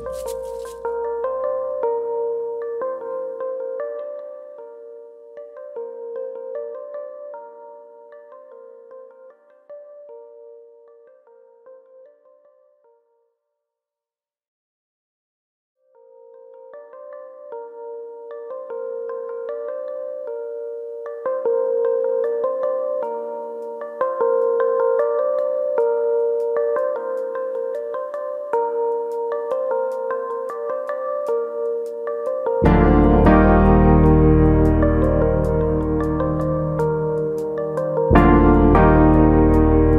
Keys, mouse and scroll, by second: 2.0 KP_1, 2.8-3.7 scroll up 3, 3.1 shift+middle click, 3.7 click, 4.0 ctrl+Tab, 6.2 click, 9.0 ctrl+z, 9.3-10.7 scroll up 1, 10.7 click, 10.7-11.4 scroll up 1, 13.8-15.0 scroll up 2, 14.1 shift+middle click, 15.0 click, 17.0-17.3 scroll down 5, 20.2 click, 21.3 ctrl+z, 21.3-21.9 scroll up 3, 21.9 ctrl+z, 21.9-22.6 scroll up 1, 22.9 ctrl+shift+z, 23.1 scroll up 2, 23.3 shift+middle click, 23.7-24.3 scroll down 1, 25.5 click, 29.7 ctrl+z, 30.7 click, 32.1 click, 35.1-35.6 scroll down 3, 36.3 middle click, 36.3-36.7 scroll down 3, 37.3-38.1 scroll up 6, 38.1 shift+click, 38.1-38.6 scroll up 1, 38.6 middle click, 39.0 ctrl+z, 39.3 middle click.